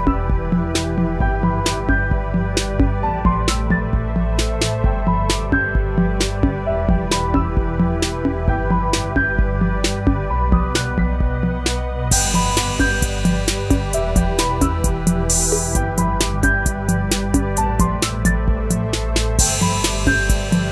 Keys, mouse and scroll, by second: 0.6 g, 4.8-8.6 drag, 15.4-19.9 drag, 19.9 ctrl+z.